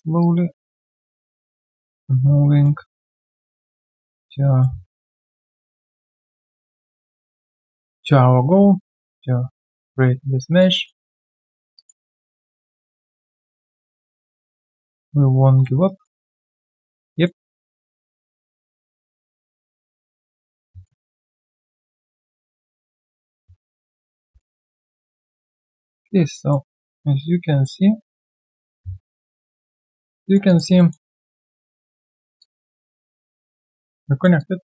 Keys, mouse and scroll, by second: 1.0 ctrl+z, 2.9 alt+middle click, 4.8 alt+middle click, 5.2 alt+click, 7.3 alt+middle click, 7.4 alt+click, 10.8 alt+middle click, 11.2 alt+click, 11.7 alt+right click, 12.4 alt+middle click, 12.7 alt+right click, 12.9 alt+click, 13.2 alt+right click, 15.8 alt+right click, 16.2 alt+middle click, 16.5 alt+right click, 16.9 alt+click, 17.2 alt+middle click, 17.5 alt+right click, 17.8 alt+middle click, 18.2 alt+click, 20.8 alt+middle click, 24.4 alt+middle click, 29.0 alt+middle click, 29.3 alt+click, 29.6 alt+right click, 29.8 alt+click, 30.2 alt+right click, 30.4 alt+click, 30.8 alt+middle click, 31.1 alt+click, 31.5 alt+right click, 31.7 alt+click, 32.1 alt+middle click, 32.4 alt+click, 34.1 alt+middle click, 34.4 alt+click.